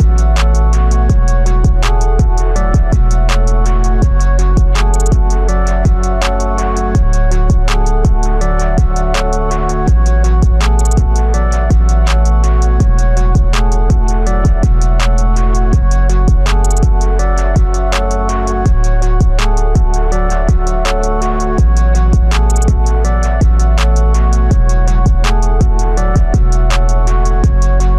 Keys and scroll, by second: 27.8 ].